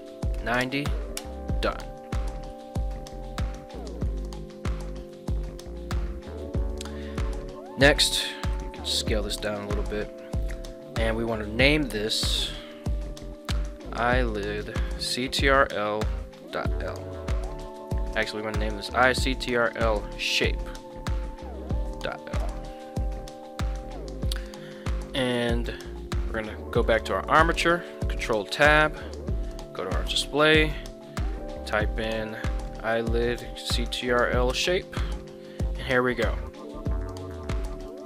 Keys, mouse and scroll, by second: 0.3 KP_9, 0.6 KP_0, 1.2 KP_Enter, 2.3 middle drag, 3.7 middle drag, 5.1 shift+middle drag, 6.4 shift+middle click, 6.8 middle click, 8.5 s, 9.6 click, 12.3-24.3 drag, 17.8 BackSpace, 26.4 right click, 26.8 right click, 27.3 right click, 27.8 ctrl+Tab, 30.2-35.2 drag, 33.4 Down, 36.6 right click, 37.7 ctrl+Tab, 37.9 right click.